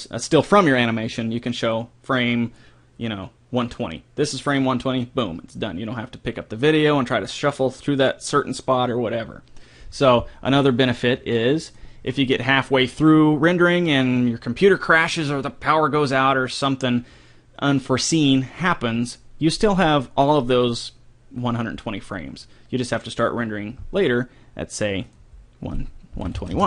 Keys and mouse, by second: 10.5-12.2 drag, 25.1-26.5 drag.